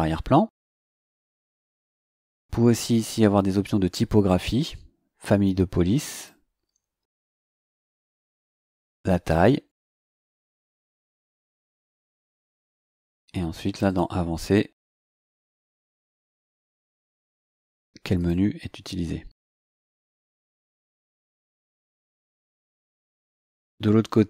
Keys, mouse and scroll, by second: 1.2 click, 3.0 click, 6.1 click, 7.6 scroll down 2, 8.2 scroll down 2, 9.8 click, 10.9 click, 13.8 click, 14.9-15.2 scroll down 2, 18.1 click, 20.2-20.5 scroll down 2, 20.9-21.6 scroll up 4.